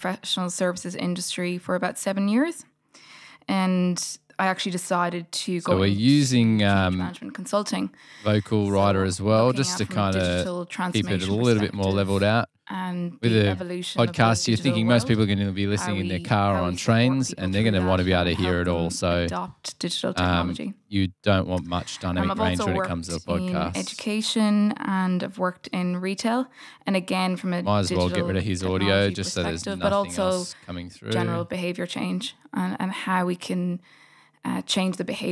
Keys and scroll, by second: 29.8 Delete, 30.4 f, 31.5 g, 33.5 d.